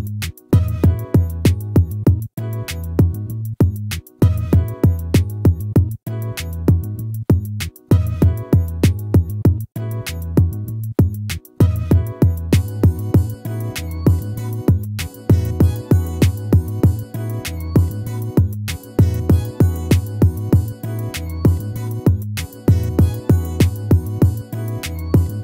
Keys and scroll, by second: 0.6 ctrl+-.